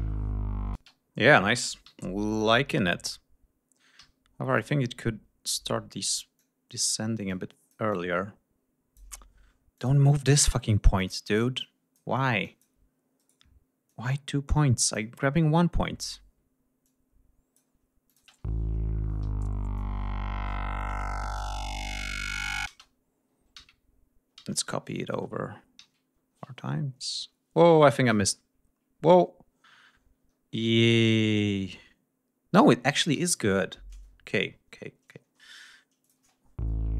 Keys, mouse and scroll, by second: 0.7 space, 1.8 r, 4.0 d, 4.5 click, 6.3 click, 7.3-9.1 drag, 9.7 shift+click, 10.6 shift+right click, 11.0 shift+click, 11.6 click, 12.4 click, 13.2 shift+right click, 13.9-15.1 drag, 16.8 click, 18.1 click, 18.2 space, 18.5 scroll down 2, 19.2 r, 19.7-21.5 drag, 22.0 ctrl+c, 22.6 ctrl+space, 23.5 ctrl+v, 24.3 ctrl+v, 24.6 ctrl+scroll down 2, 24.9 ctrl+scroll up 2, 25.8 ctrl+v, 26.2 ctrl+scroll down 2, 27.3-27.6 ctrl+scroll up 2, 28.2 ctrl+y, 29.1-29.8 ctrl+scroll up 4, 30.3 ctrl+scroll down 2, 31.1 ctrl+y, 33.1 ctrl+shift+y, 34.3 ctrl+scroll down 2, 35.1 ctrl+scroll up 2, 36.0 click, 36.2 space, 36.4 ctrl+scroll up 2.